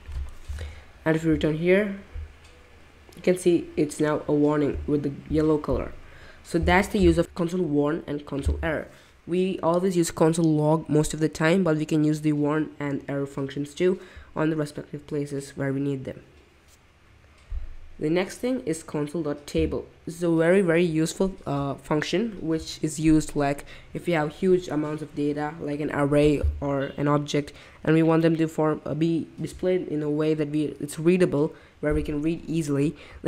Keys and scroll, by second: 0.5 super+Tab.